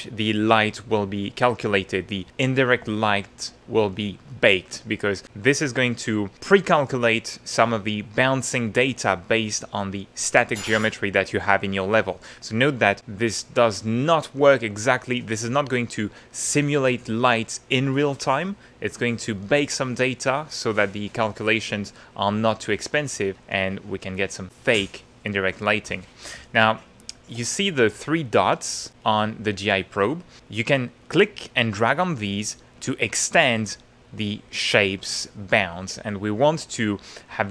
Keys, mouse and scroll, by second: 3.2 shift+middle click, 22.9 middle click, 23.5 middle click, 25.3-26.3 middle drag, 26.4-27.5 ctrl+middle drag, 27.5-29.2 ctrl+middle drag, 31.0-35.5 drag, 35.9 ctrl+click, 36.1 ctrl+middle click, 36.3 ctrl+click.